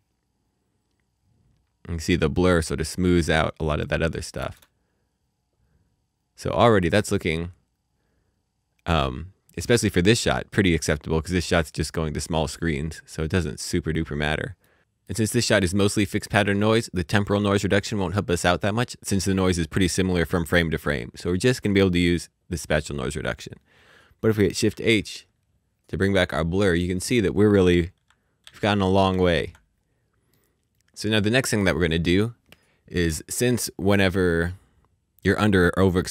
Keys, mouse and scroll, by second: 0.1-1.7 scroll down 1, 4.3 space, 10.4 space, 12.2 middle click, 13.8-14.4 scroll up 1, 14.4 middle click, 15.0 middle click, 24.6 shift+h, 26.3 middle click, 28.4-29.1 typing, 30.2 typing, 30.3 middle click.